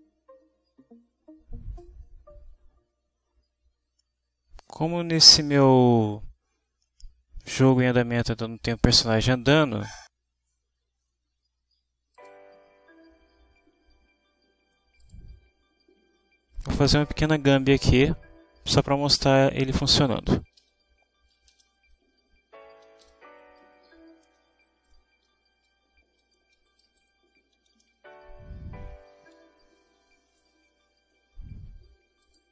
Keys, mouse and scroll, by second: 12.3 click, 15.1 click, 20.2 Return, 20.6 Up, 21.1-23.6 typing, 24.0 Down, 24.1 Return, 24.4 Return, 24.9 Down, 25.2 i, 25.3 space, 28.0 Right, 28.7-32.5 typing, 29.5 click.